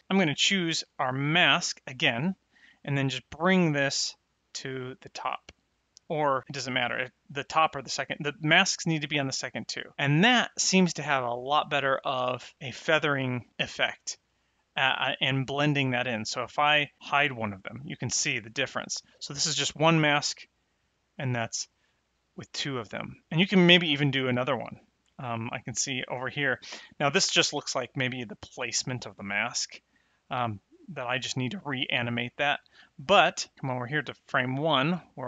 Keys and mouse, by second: 0.0 click, 3.2 click, 6.4 click, 7.6 click, 10.4 middle click, 12.5 middle click, 17.0 click, 21.0 click, 23.3 middle click, 34.8 middle click.